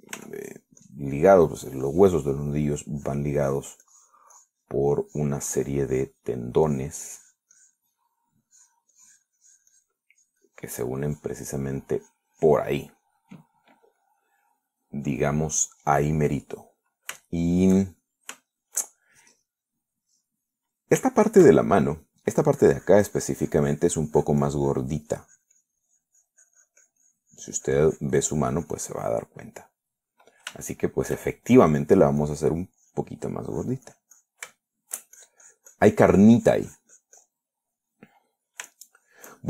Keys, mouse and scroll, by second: 1.4 f, 2.1 click, 4.1 click, 4.6 click, 6.3 click, 7.9-9.2 drag, 9.7-11.3 drag, 11.4 click, 12.8-14.0 drag, 17.0 middle click, 18.5 shift+middle click, 19.5 shift+middle click, 19.8 shift+middle click, 21.4 middle click, 22.3-23.3 shift+middle drag, 23.8-27.4 drag, 27.6-30.5 drag, 30.6 middle click, 31.2 middle click, 31.9 shift+middle click, 32.6 shift+middle click, 33.5 click, 34.0 click, 34.7 click, 35.8 shift+middle click, 36.4-38.7 shift+drag, 38.7 shift+middle click, 39.3 middle click.